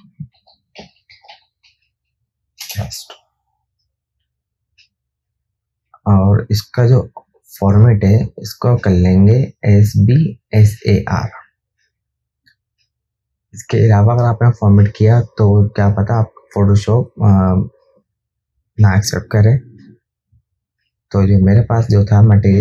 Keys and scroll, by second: 0.0-3.1 typing, 2.9 Return.